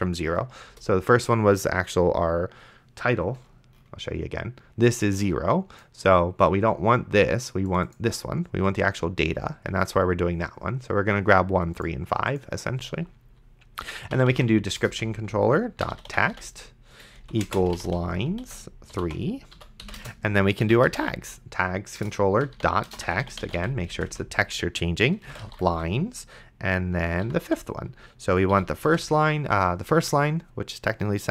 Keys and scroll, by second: 0.7 Return, 14.0-24.1 typing, 20.0 Return, 22.0 Return, 25.1-28.9 typing, 28.5 End.